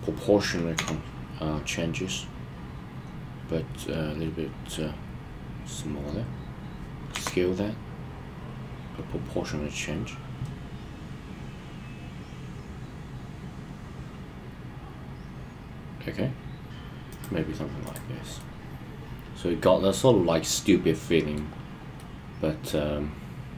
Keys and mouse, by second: 0.7 s, 7.0 s, 17.0 click, 18.3-21.3 middle drag, 21.9-23.5 middle drag.